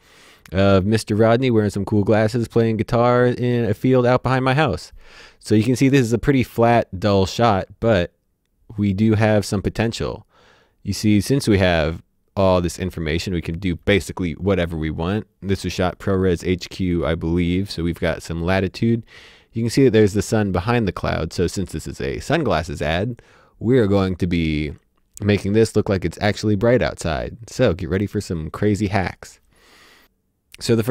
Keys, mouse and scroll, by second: 16.9 click, 28.5 click.